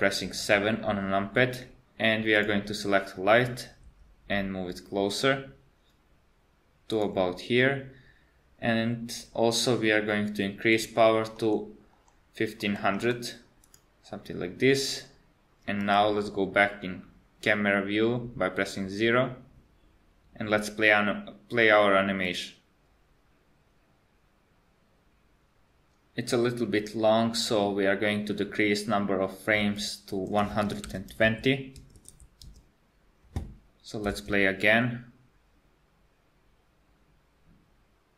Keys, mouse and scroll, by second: 2.4 click, 3.8 g, 10.8 click, 13.0 KP_0, 15.9 KP_0, 22.3 click, 29.7 click, 32.1 BackSpace, 34.1 space.